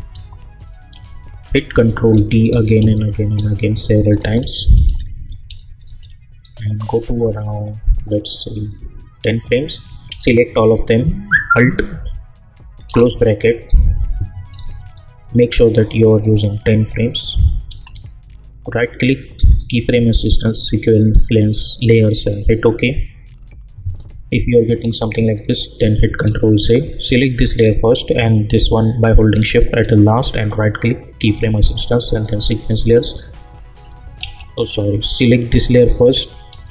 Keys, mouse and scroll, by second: 0.1 =, 1.7 ctrl+d, 7.4-10.0 drag, 10.0 ctrl+a, 12.8 alt+], 14.5 =, 14.7 =, 15.2 =, 16.2 click, 17.0-17.9 typing, 18.6 right click, 19.6 click, 26.0 ctrl+z, 26.5 click, 27.5 scroll down 1, 29.9 shift+click, 30.5 right click, 31.3 click, 34.2 ctrl+z, 34.6 click, 35.8 scroll up 1.